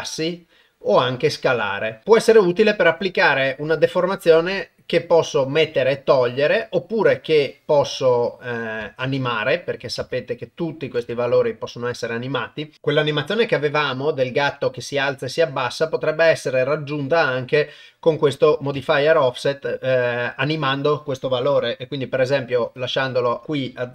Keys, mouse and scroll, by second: 1.2 click, 2.0 KP_0, 7.5-9.1 drag, 9.7 click, 10.6 click, 15.1-18.2 drag, 18.4 click.